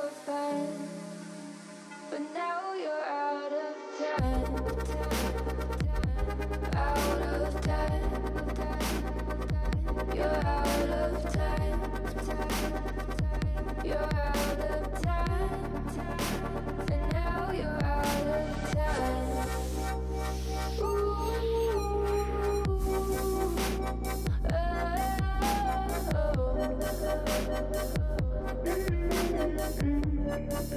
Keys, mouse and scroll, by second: 0.1-1.0 drag, 1.0-1.9 shift+middle drag, 1.9 shift+click, 3.0 KP_1, 3.7 shift+click, 4.4-4.9 shift+drag, 4.9 scroll down 1, 5.2-6.2 middle drag, 6.2 3, 6.5 shift+middle click, 6.9 shift+d, 7.6 alt+e, 10.7 alt+z, 11.2 middle click, 11.7 ,, 12.4 ., 13.6 s, 17.4 middle click, 18.2 scroll up 5, 18.5 middle click, 19.2 click, 19.7 middle click, 19.9-20.3 scroll down 4, 20.3 Tab, 20.6 scroll down 2, 20.8-21.4 middle drag, 21.4 click, 21.6 middle click, 21.8-23.0 scroll up 3, 23.0 scroll down 4, 23.2 middle click, 23.9 scroll up 4, 24.1-25.5 middle drag, 25.5 click, 25.8 Tab, 26.0-27.4 shift+middle drag, 27.6 alt+z, 27.9 click, 29.0 l, 29.8 a, 29.9 a, 30.1 l, 30.5 scroll down 2, 30.7 alt+z.